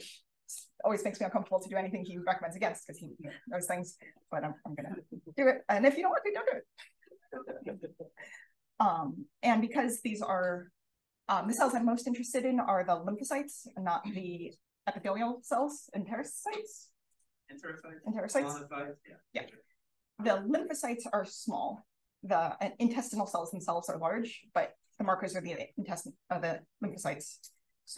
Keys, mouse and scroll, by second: 4.0-5.7 typing, 9.7-19.7 scroll up 1, 27.1 click.